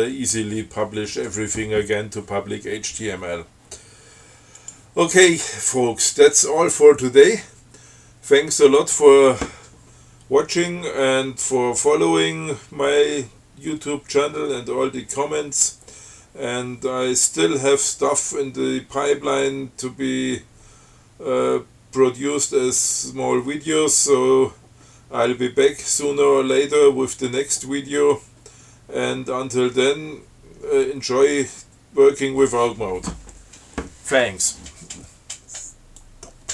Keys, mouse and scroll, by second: 4.8 click, 36.3 click.